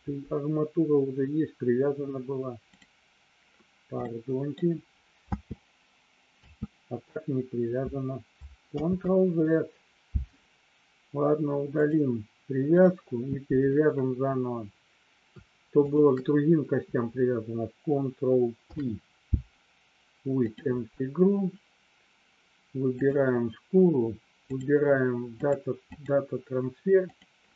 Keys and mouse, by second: 4.2 middle click, 5.4 space, 6.7 space, 9.4 ctrl+z, 11.9 click, 12.9 click, 16.0 shift+click, 18.7 ctrl+p, 23.0 click, 24.7-26.3 drag, 27.1 click.